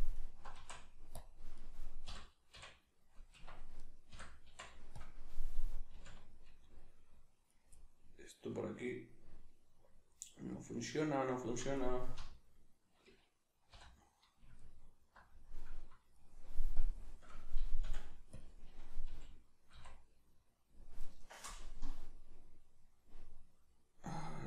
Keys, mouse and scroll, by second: 0.1 alt+right click, 0.5 x, 1.5 right click, 2.0 l, 3.4 Escape, 3.8 right click, 4.1 l, 5.9 alt+h, 6.5 middle click, 7.5 right click, 7.7 middle click, 11.7 right click, 12.1 l, 14.6 alt+right click, 16.7-17.8 drag, 17.8 ., 19.1 g.